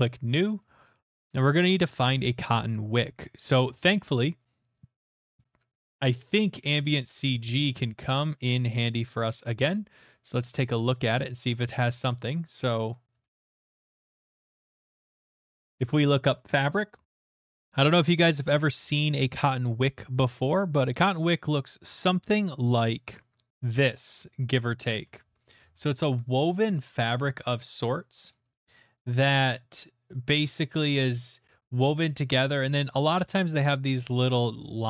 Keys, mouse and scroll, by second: 0.8 middle click, 1.2 middle click, 1.2 middle click, 1.5 middle click, 1.8 middle click, 5.4 click, 7.0 click, 8.2 click, 9.2 click, 10.5 click, 13.2-14.4 typing, 14.4 Return, 15.3-16.7 drag, 16.8 scroll, 17.7 scroll, 18.3-18.9 scroll, 19.6 click, 21.0 click, 22.4 click, 22.7 right click, 23.5 click, 23.7 click, 24.7-25.3 scroll, 28.6-29.6 ctrl+scroll, 29.6-30.1 ctrl+scroll, 31.1 ctrl+middle click, 31.1 ctrl+middle click, 31.2 ctrl+middle click, 31.4 middle click, 31.4 click, 31.5 middle click, 31.5 click, 31.5 right click, 31.5 middle click, 32.5 scroll.